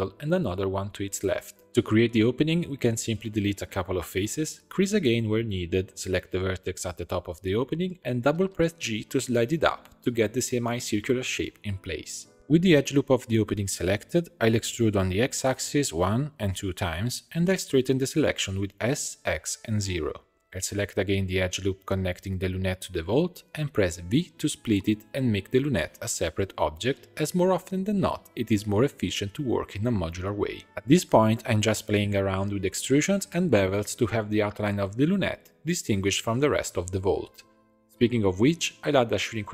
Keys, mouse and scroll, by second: 0.6 middle click, 1.3 ctrl+r, 2.2 3, 2.6 click, 3.0 shift+click, 3.6 x, 5.0 2, 5.2 click, 5.8 shift+e, 6.6 1, 6.9 click, 7.5 g, 10.1-11.2 middle drag, 11.2 Tab, 11.5 middle click, 12.2 scroll up 3, 12.4 2, 12.7 alt+click, 13.8 e, 17.2 e, 18.8 s, 20.2 click, 21.0 alt+shift+click, 23.6 v, 24.6 middle click, 25.4 alt+a, 26.2 l, 26.9 p, 27.8 middle click, 28.1 alt+e, 29.8 alt+click, 30.5-31.6 drag, 31.8 middle click, 32.7 e, 34.5 a, 36.7 alt+click, 36.9 alt+e, 38.4 click, 39.1-39.5 drag.